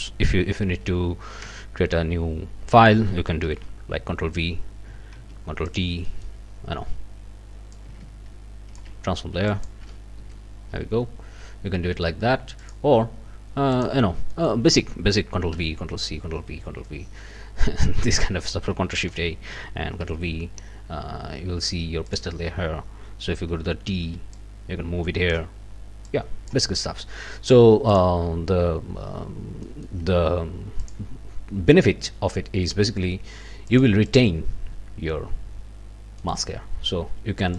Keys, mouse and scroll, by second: 0.6 ctrl+n, 1.8 Return, 2.4 scroll down 2, 2.7 ctrl+middle click, 3.5 ctrl+v, 5.1 ctrl+t, 5.7 ctrl+click, 5.8 scroll up 1, 6.1 ctrl+click, 6.7 ctrl+scroll down 3, 7.7-8.9 ctrl+shift+drag, 9.1 ctrl+shift+scroll up 2, 9.5 click, 10.2 Return, 10.6-10.9 scroll up 1, 12.6 click, 13.7 click, 14.3 click, 15.5 ctrl+v, 16.6 ctrl+z, 18.3-18.7 scroll up 3, 19.1 ctrl+shift+a, 20.0 ctrl+v, 20.6 ctrl+scroll down 3, 22.3 click, 23.9 t, 24.3-25.5 drag, 26.1 click, 27.9 click, 29.2 scroll up 2, 29.6 middle click, 30.8 middle click, 33.7 middle click, 34.1 middle click, 34.1 click, 36.2 right click.